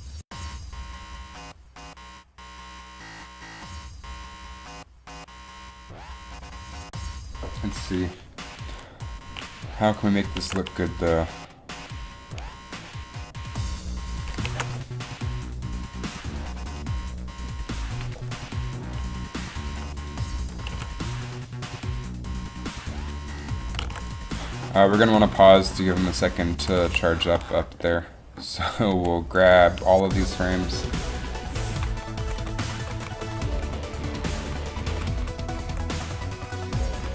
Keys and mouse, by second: 10.0 click, 10.5 alt+a, 14.7 alt+a, 19.9 click, 20.8 alt+a, 24.2 alt+a, 27.1 a, 29.0 b, 32.4 Right, 32.5 Right, 32.7 Right, 32.9-33.4 Right, 33.8 Right, 34.3 Right, 34.6 Right, 34.8 Right, 35.3 Right, 35.6 Right, 35.8 Right, 36.1 Right, 36.3 Right, 36.5 Right, 36.8 Right.